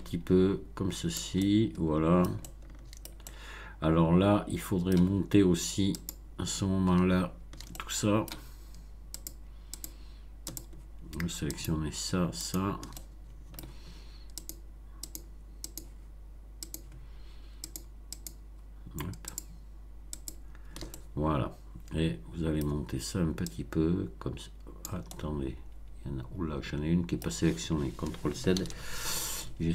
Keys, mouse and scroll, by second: 1.3-3.1 middle drag, 3.2-5.1 shift+middle drag, 5.9 click, 7.7-8.4 shift+middle drag, 9.1 shift+click, 9.7 shift+click, 10.4 shift+click, 11.5 shift+click, 12.4 shift+click, 12.9 shift+middle click, 14.4 shift+click, 15.0 shift+click, 15.6 shift+click, 16.6 shift+click, 17.6 shift+click, 18.1 shift+click, 19.2 shift+click, 20.1 shift+click, 20.8-22.8 shift+middle drag, 23.4-25.0 drag, 25.0-27.3 middle drag, 28.5 ctrl+z, 29.1 ctrl+shift+z.